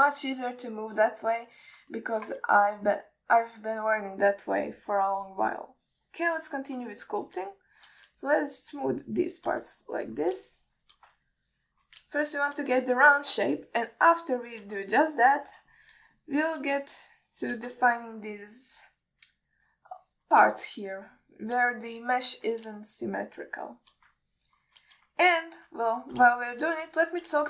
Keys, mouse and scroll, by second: 0.6-0.9 scroll down 2, 1.2-2.3 ctrl+alt+middle drag, 2.6 alt+middle click, 3.2 alt+shift+middle click, 3.7-5.4 scroll up 2, 5.6-6.1 alt+middle drag, 6.4 ctrl+alt+middle drag, 7.1 click, 7.9 alt+shift+middle click, 8.2 middle click, 8.8 alt+shift+middle click, 9.5 shift+click, 10.2 shift+click, 11.1 shift+middle click, 11.7 shift+click, 12.6 alt+shift+middle click, 13.4 shift+click, 14.1 alt+shift+middle click, 14.9 shift+click, 15.7 shift+click, 16.2 alt+middle click, 17.0 alt+shift+middle click, 17.4 ctrl+alt+middle click, 18.1 shift+click, 19.1 alt+shift+middle click, 21.2 shift+middle click, 21.9 shift+click, 22.5 shift+click, 23.2 alt+shift+middle click, 24.1 shift+click, 24.7 shift+click, 25.5 alt+shift+middle click, 26.6 alt+middle click, 27.1 ctrl+alt+middle click.